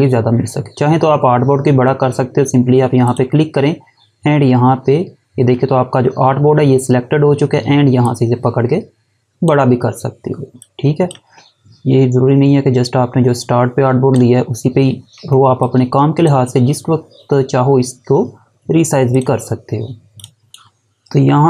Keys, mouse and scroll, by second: 2.9 click, 7.8 click, 15.1 space, 15.4 click, 18.9 click, 20.5 Delete.